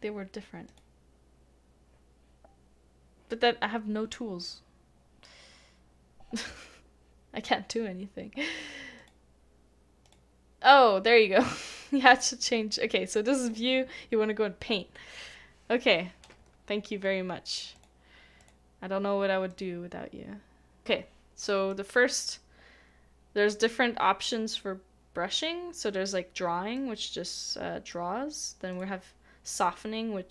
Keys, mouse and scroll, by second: 21.5-23.4 scroll up 1.